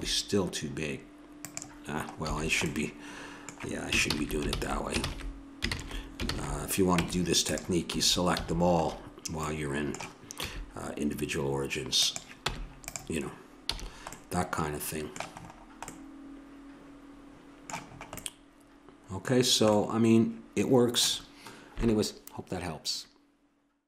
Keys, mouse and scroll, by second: 0.9 click, 1.3-2.4 middle drag, 2.2 a, 4.1 ctrl+z, 4.5 ctrl+z, 5.0 ctrl+z, 5.7 ctrl+z, 6.3 ctrl+z, 6.9 Tab, 7.9 a, 8.4 a, 8.8 middle click, 10.4 s, 12.5 Tab, 13.6 a, 15.0-16.0 middle drag, 16.1 middle click, 16.9 middle click, 17.2-19.4 middle drag, 20.3 middle click, 23.1 middle click.